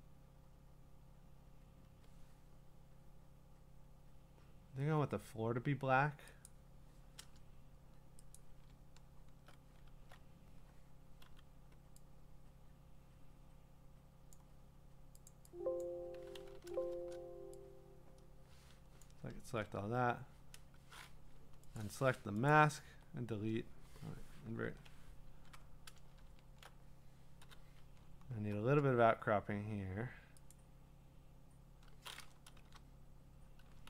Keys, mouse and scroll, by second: 6.5-8.3 drag, 11.2 m, 14.4 click, 15.3 click, 15.8 click, 16.9 Return, 19.0 click, 19.6 BackSpace, 21.2 Escape, 21.8 click, 22.5 click, 24.4 BackSpace, 24.6 ctrl+i, 25.3 ctrl+d, 26.3-27.4 scroll, 27.4 l, 28.0 i, 28.1 scroll, 30.5 click, 32.6 l.